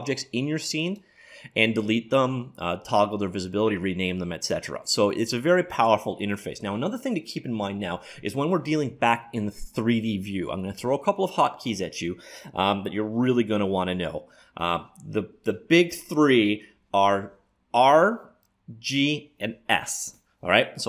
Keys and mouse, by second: 0.9-2.7 drag, 4.5-6.3 drag.